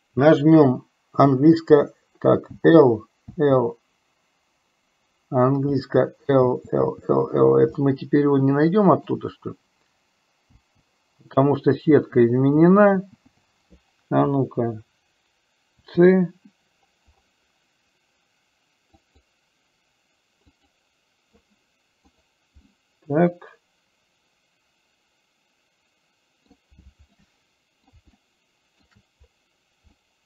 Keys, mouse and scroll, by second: 1.4 l, 3.0 l, 4.5 l, 5.9 l, 7.0 l, 8.0-9.5 middle drag, 8.0 l, 10.8 l, 12.2 l, 12.9 l, 13.2 l, 13.7 l, 15.8 c, 22.9-25.0 middle drag, 25.0-26.1 drag, 26.1 middle click, 27.3 middle click, 27.5 click, 27.6 middle click, 28.4 shift+middle click.